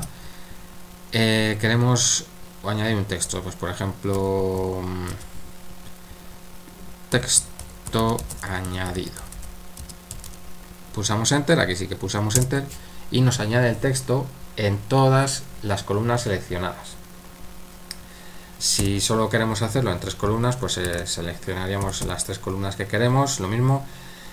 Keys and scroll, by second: 4.5 typing, 6.9-10.2 typing, 12.5 Return, 18.8 typing, 20.9-22.0 typing.